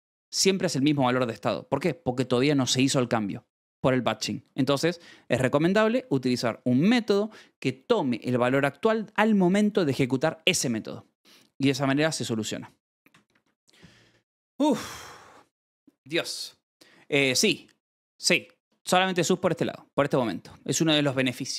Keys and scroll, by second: 3.4-4.5 typing, 4.3 Escape, 6.2 e, 7.2 Escape, 11.1 Escape, 13.0 j.